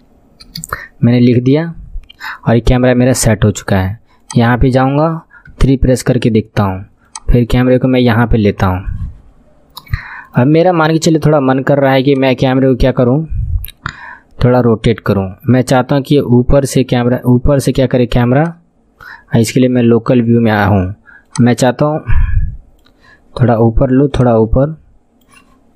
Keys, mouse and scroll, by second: 5.5 KP_3, 6.1 scroll down 5, 7.1 click, 10.0-12.1 shift+middle drag, 12.1-15.0 drag, 15.0 r, 21.3-25.7 drag.